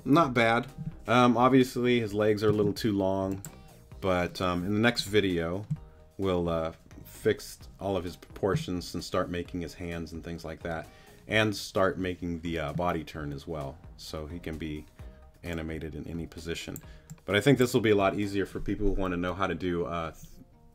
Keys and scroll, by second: 2.5 space.